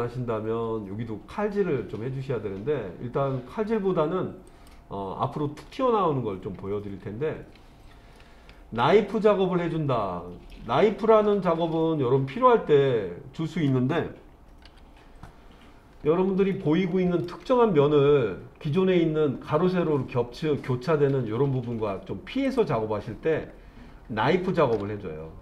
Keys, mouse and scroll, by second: 4.5 click, 7.2-7.5 scroll up 1, 8.2 shift+middle click, 9.2-10.5 middle drag, 14.7 KP_3, 15.9 scroll up 2, 16.5 shift+middle click, 22.5 click, 25.0 click.